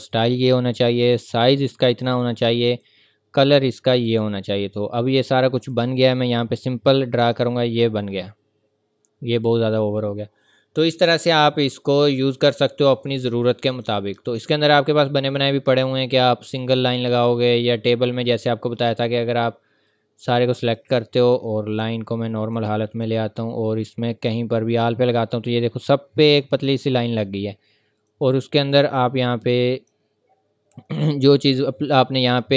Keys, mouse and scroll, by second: 12.6 click, 19.2 click.